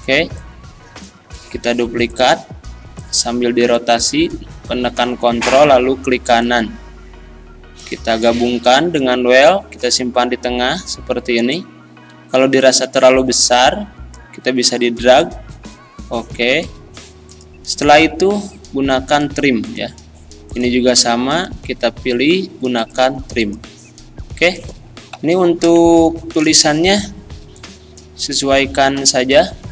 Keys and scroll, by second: 25.2 Delete.